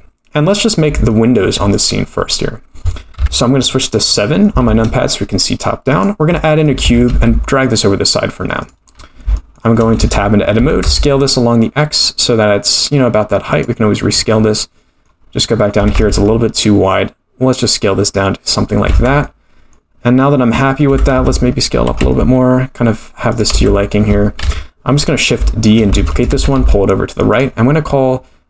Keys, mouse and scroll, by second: 1.1 shift+middle drag, 1.7 click, 3.2 KP_7, 3.9-4.4 scroll down 4, 4.6 shift+a, 6.8 g, 8.9 scroll up 6, 9.4 shift+middle drag, 10.0 Tab, 10.6 s, 14.2 middle click, 15.8 s, 18.9 Tab, 19.2-19.7 middle drag, 20.2-20.6 scroll up 2, 20.9 Tab, 21.1 s, 23.5 Tab, 24.4 KP_7, 25.5-25.8 shift+middle drag, 25.7 shift+scroll up 1, 26.0 shift+d, 26.3 g.